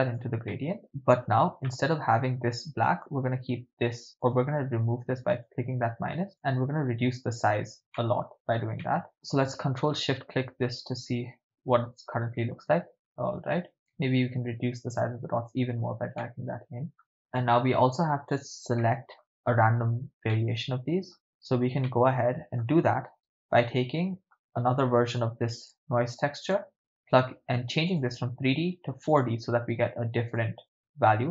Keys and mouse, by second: 0.5-0.8 middle drag, 1.7 ctrl+middle click, 3.0-4.1 drag, 4.2 click, 5.3 click, 6.4-7.6 drag, 8.0 ctrl+middle click, 8.9 middle click, 9.7 click, 11.4 ctrl+shift+click, 13.7 click, 16.2-17.1 middle drag, 18.8 middle click, 20.3-21.2 middle drag, 21.8-22.6 ctrl+middle drag, 23.2-24.3 ctrl+middle drag, 24.3 click, 25.5 shift+d, 26.4 click, 27.9-29.3 drag, 30.4 click.